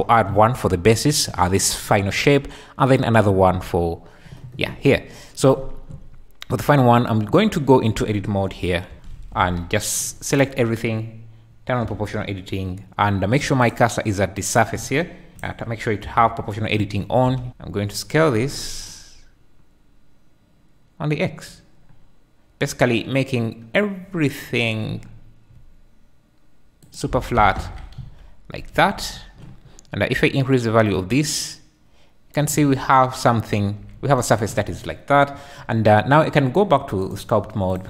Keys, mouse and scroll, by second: 2.9-6.8 drag, 6.8 Tab, 8.9 KP_1, 9.3 alt+z, 10.1 click, 11.8 g, 15.3 n, 15.3 s, 16.0 o, 17.5 n, 17.5 s, 26.8 click, 27.1 Tab, 27.3 `, 27.9 z, 28.9 alt+z, 30.2-32.4 drag, 37.0-37.8 drag.